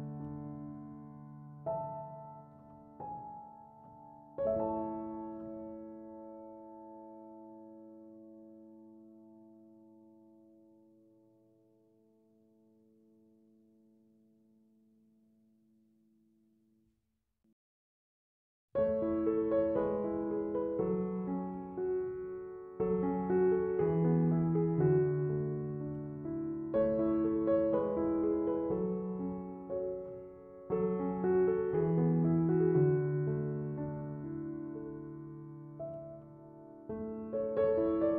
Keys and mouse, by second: 0.7 shift+click, 4.0-10.1 drag, 13.5 click, 17.2 click, 25.5 click, 31.3-38.1 drag.